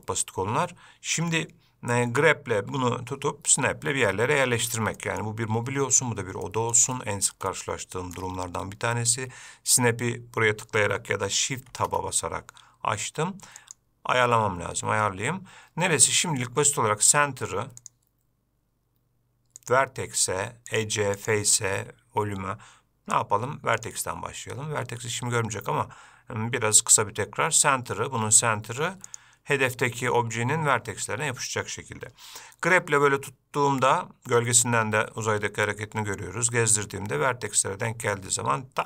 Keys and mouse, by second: 2.8 g, 5.2 middle click, 6.6 shift+middle drag, 7.1 middle click, 7.7-8.3 shift+middle drag, 11.9 shift+Tab, 13.8-15.8 drag, 18.0-27.9 drag, 29.4-31.1 drag, 32.9 g.